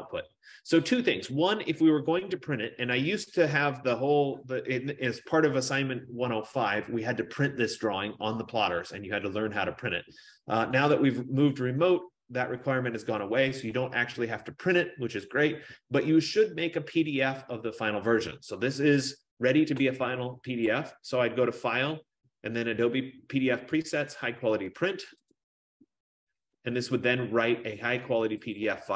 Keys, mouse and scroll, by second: 20.8 click, 25.4 click, 28.7 click.